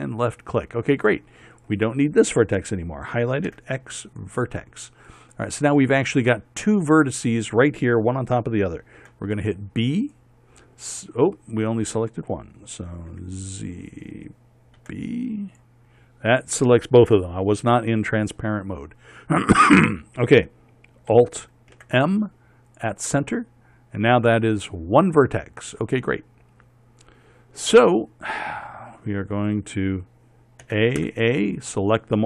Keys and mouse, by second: 4.1 x, 9.7 b, 13.8 z, 15.4 b, 17.8 click, 22.4 alt+m, 31.3 a, 31.7 a.